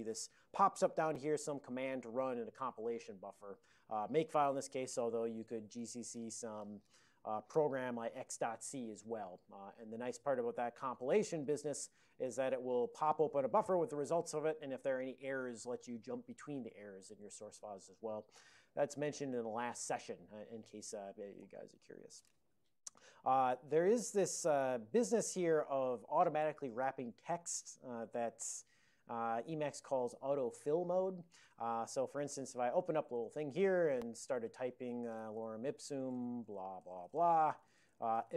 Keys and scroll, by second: 5.3 alt+BackSpace, 5.3-6.5 typing, 7.7-8.7 typing, 21.4 ctrl+g, 25.4 ctrl+n, 31.4 ctrl+p, 31.6 ctrl+p, 31.8 ctrl+p, 32.0 ctrl+p, 32.3 ctrl+o, 32.8 -, 33.1 space, 34.1-38.3 typing.